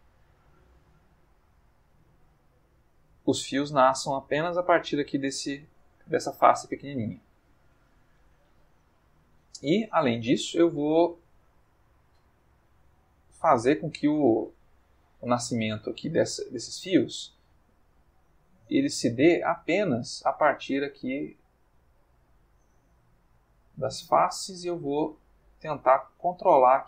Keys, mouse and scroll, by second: 0.2 click, 1.4 click, 2.7 click, 3.5 ctrl+middle click, 4.6 s, 5.6 click, 5.8 Tab, 6.4-8.3 middle drag, 8.5-9.6 ctrl+middle drag, 12.1-13.8 drag, 16.5 click, 18.1 middle click, 19.3 click, 20.5 click, 21.6 click, 22.4 middle click, 24.3-26.8 drag.